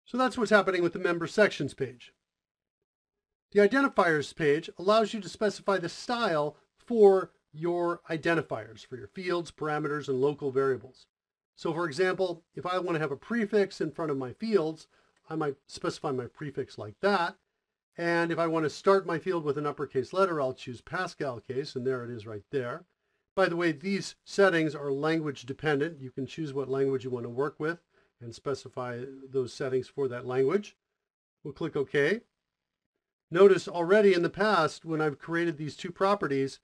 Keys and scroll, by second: 15.1 shift+-, 32.4 ctrl+alt+shift+o.